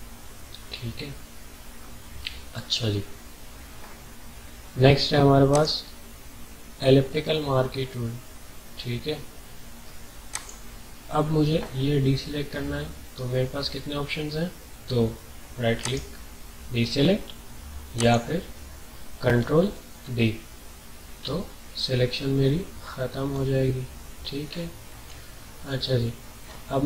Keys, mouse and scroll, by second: 5.5 right click, 5.5-6.4 typing, 10.3 click, 10.3 typing, 15.8 right click, 15.8 typing, 18.0 click, 20.0 ctrl+d, 21.3 alt+scroll down 1, 21.8 alt+scroll down 1, 22.3 ctrl+scroll up 1, 22.5 typing, 24.4 ctrl+scroll up 1, 25.1-26.5 alt+scroll down 3, 26.5 scroll up 2.